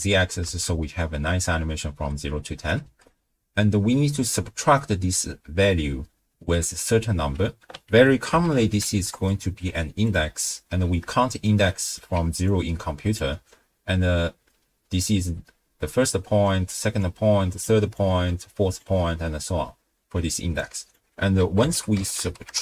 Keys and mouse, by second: 0.5 shift+space, 1.9 space, 2.8 shift+space, 6.0 space, 7.0 space, 7.9 ctrl+a, 11.3 shift+middle click, 11.9 middle click, 12.2-19.8 d, 12.5 click, 17.0 click, 18.8 drag, 20.6-22.6 drag, 20.6 d.